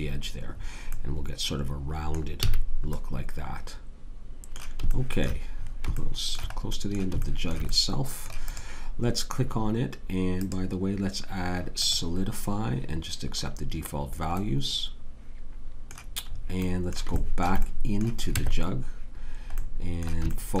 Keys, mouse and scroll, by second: 2.4 a, 8.4-10.4 drag, 18.3 Tab.